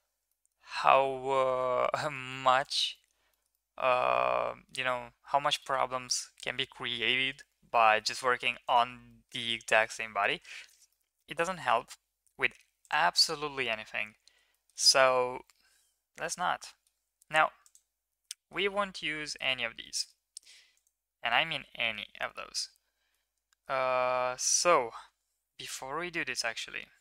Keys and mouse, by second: 0.3 middle click, 1.5 Tab, 1.9-2.3 shift+middle drag, 2.4 ctrl+s, 2.9 middle click, 3.3 shift+middle click, 3.5-4.7 middle drag, 5.5 middle drag, 6.0 middle drag, 7.7 shift+drag, 8.0 middle click, 8.6 middle click, 9.0 middle drag, 9.4 Tab, 9.7 middle drag, 10.6 shift+middle drag, 10.9 middle drag, 13.7 middle click, 14.5 shift+middle drag, 15.3 3, 16.2-16.8 middle drag, 17.6 click, 18.3 shift+middle drag, 18.7-19.4 middle drag, 19.8 middle click, 21.3-22.0 middle drag, 22.5 middle click, 23.2-23.7 middle drag.